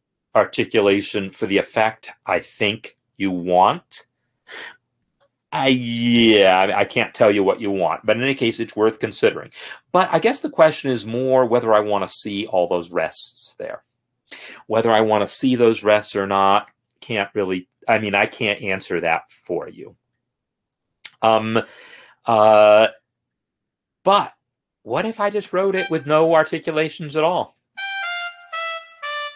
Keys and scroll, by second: 10.6 ctrl+z, 27.7 space.